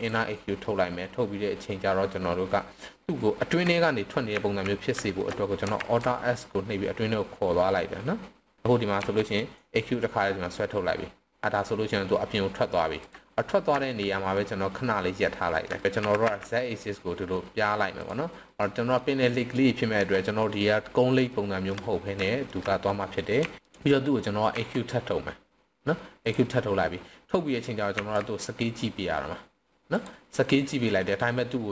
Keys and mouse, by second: 0.3 middle click, 3.3 KP_7, 4.3 z, 5.0 shift+middle click, 5.7 alt+s, 8.6 ctrl+z, 9.0 e, 13.0 drag, 13.7 z, 14.3-15.2 middle drag, 15.8 shift+middle click, 15.9 KP_1, 16.0 s, 16.1 z, 18.0 click, 18.4 middle click, 19.9 KP_7, 21.3 shift+middle click, 22.3 shift+middle click, 23.4 r, 24.6 e, 26.2 drag, 27.9 s, 29.9 click, 30.4-31.1 middle drag.